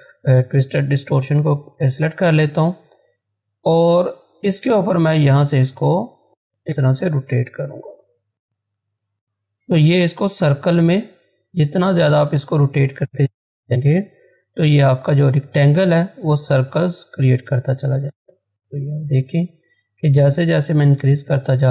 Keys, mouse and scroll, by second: 1.2-1.8 scroll down 1, 10.6-21.2 drag.